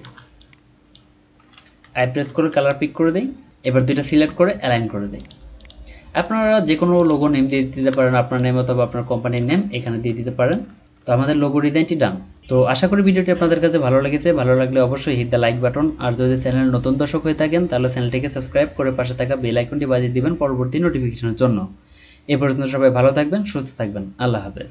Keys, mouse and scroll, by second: 1.8 typing, 5.6 double click, 5.9-6.7 scroll down 1, 8.3 alt+shift+click, 10.8 ctrl+scroll down 1, 11.1-11.8 scroll up 1.